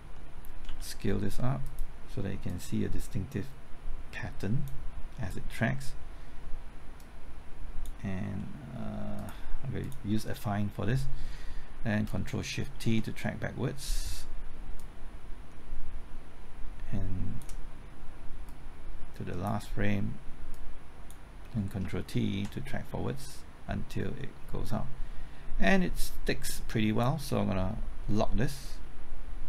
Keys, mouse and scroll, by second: 0.6 ctrl+s, 1.6-4.9 drag, 8.4 middle click, 9.1 click, 12.7 ctrl+shift+t, 13.4 ctrl+shift+t, 14.8-21.8 drag, 21.8 typing, 22.3 ctrl+t, 24.6-29.4 drag.